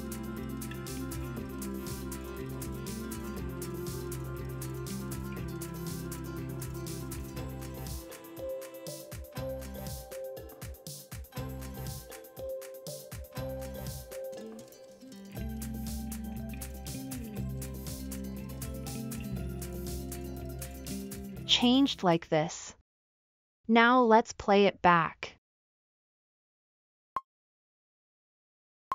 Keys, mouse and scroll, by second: 27.9-28.9 drag.